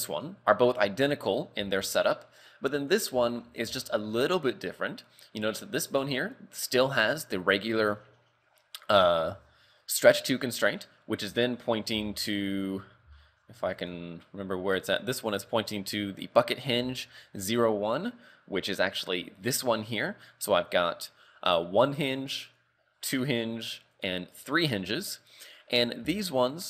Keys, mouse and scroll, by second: 0.2 right click, 1.8 shift+middle click, 2.8 right click, 3.3 shift+middle click, 3.8 shift+middle click, 4.4 scroll up 1, 10.3-10.8 scroll up 3, 11.2 right click, 11.7-12.1 scroll down 2, 12.1 shift+middle click, 12.5 right click, 13.2 shift+middle click, 13.8 right click, 14.9 right click, 16.9 shift+middle click, 17.3 scroll up 3, 18.0 right click, 22.5 right click, 24.0 right click, 26.2 shift+middle click.